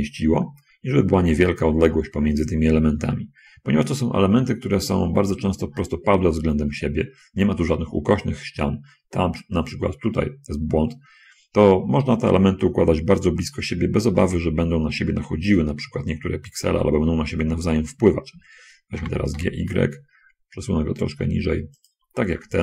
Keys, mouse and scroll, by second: 0.4 shift+middle click, 1.7 shift+click, 1.9 shift+middle click, 19.3 g, 19.7 y, 22.1 shift+click.